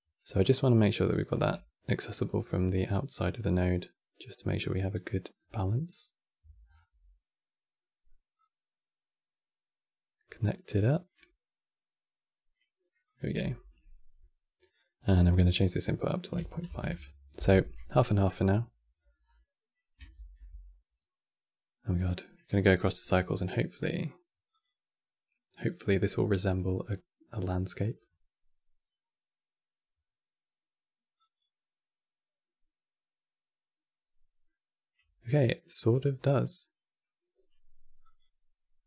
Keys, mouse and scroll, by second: 31.7 Left.